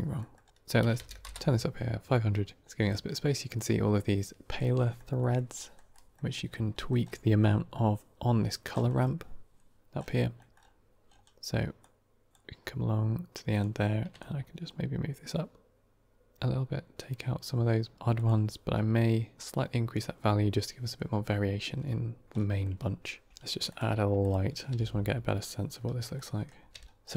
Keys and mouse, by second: 0.1 middle click, 0.5-1.6 drag, 1.0 KP_0, 4.7 middle click, 5.1 middle click, 5.5 middle click, 5.8 middle click, 6.2 middle click, 6.7 middle click, 10.3 middle click, 11.7-12.2 drag, 13.4 click, 14.1-17.9 shift+drag, 18.0 click, 22.2 middle drag, 23.3 shift+a, 24.6 g, 26.0 middle click, 26.6 g.